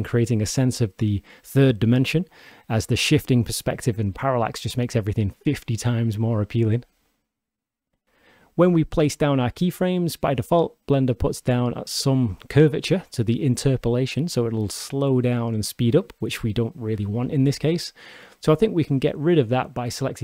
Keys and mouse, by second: 8.0 shift+Left, 8.0 shift+space, 20.0 click.